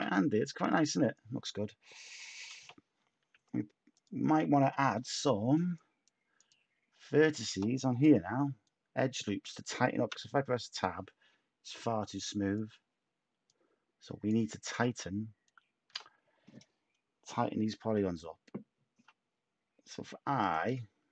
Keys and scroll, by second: 2.5 /, 3.3 Tab, 10.0 Tab, 20.9 Tab.